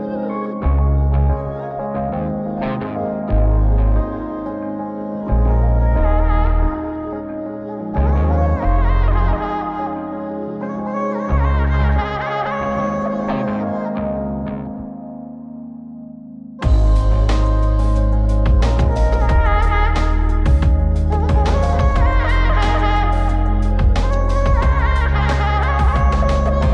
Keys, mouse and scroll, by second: 0.6 middle click, 2.0-4.1 ctrl+right drag, 4.9 click, 7.6 click, 7.7-9.7 scroll down 1, 9.7-11.0 drag, 12.0 click, 12.9 click, 13.7 ctrl+right click, 16.2-16.9 ctrl+shift+right drag, 17.6 scroll up 3, 18.2 middle click, 19.4 click, 20.0 click, 20.6 scroll down 2, 20.8 middle click, 22.0 drag, 22.6 x, 23.4-24.0 ctrl+shift+right drag, 25.1 middle click, 26.2 click.